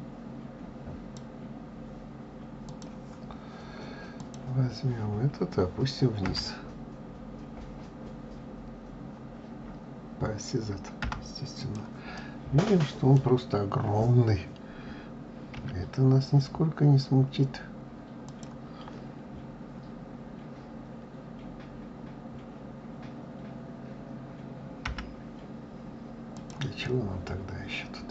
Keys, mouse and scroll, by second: 2.4 click, 4.0 click, 6.1 g, 11.9-14.9 middle drag, 26.6-28.1 middle drag.